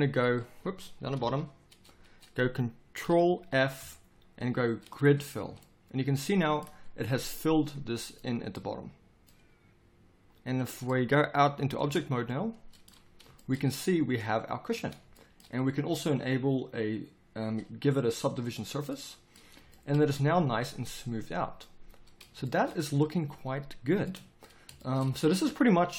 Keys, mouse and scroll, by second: 1.2 ctrl+KP_7, 3.5 ctrl+f, 11.8 Tab.